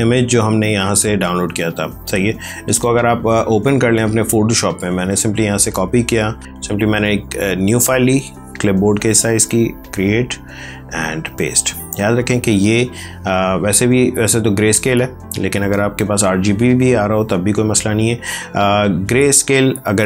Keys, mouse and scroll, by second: 5.5 alt+Tab, 6.4 ctrl+n, 10.6 ctrl+n, 11.0 ctrl+v, 15.6 click.